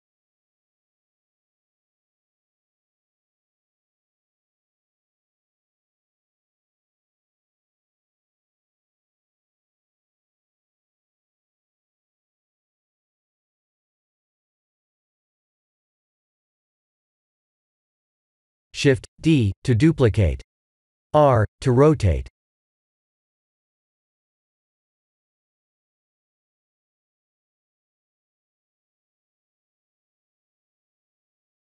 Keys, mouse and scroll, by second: 0.1 s, 1.8 middle click, 2.4 g, 3.6 g, 7.1 click, 8.8-9.5 scroll up 1, 9.5 click, 9.5 scroll up 1, 10.8 click, 15.4 click, 18.5 KP_1, 19.3 r, 20.6 g, 21.3 s, 24.3 shift+d, 25.9 r, 28.4 g, 31.5 KP_7.